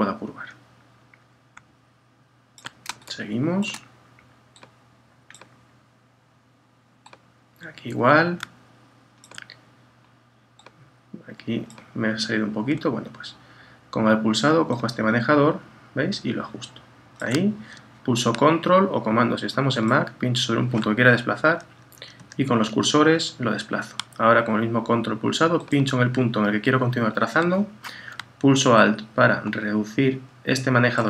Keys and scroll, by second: 21.5 Down, 22.5 Left, 23.0 Down.